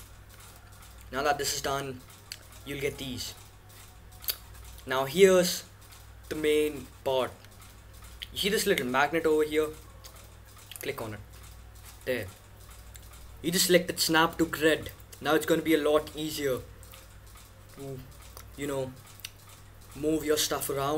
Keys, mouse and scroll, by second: 0.0-1.3 drag, 1.3-5.7 middle drag, 10.7-12.5 drag, 19.8-20.9 middle drag.